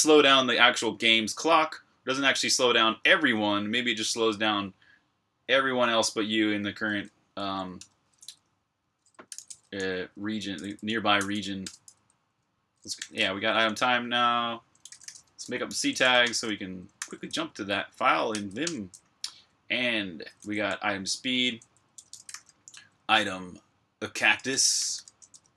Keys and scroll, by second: 7.7 Return, 8.9-11.4 typing, 12.9 super+h, 14.4-16.4 typing, 16.8 super+h, 18.0-18.7 typing, 20.0-25.5 typing.